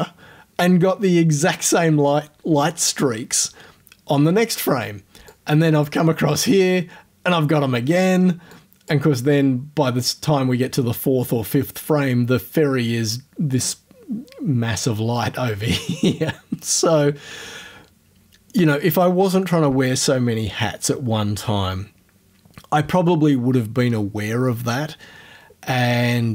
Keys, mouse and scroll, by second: 5.3 click, 8.5 click.